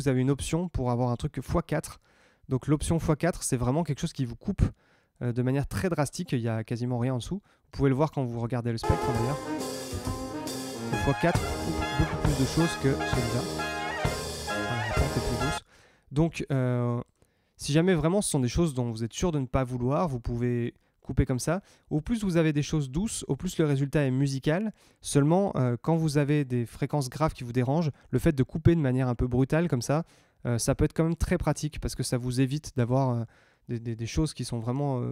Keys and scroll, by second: 8.8 space, 15.5 space.